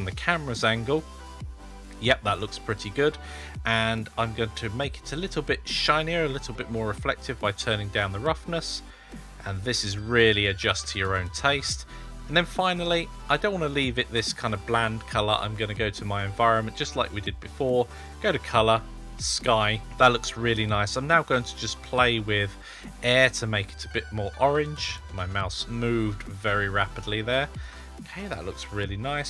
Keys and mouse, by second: 4.9-7.3 drag, 8.7-10.3 drag, 12.7 click, 16.3 click, 17.6-19.1 drag, 21.2-27.5 shift+drag.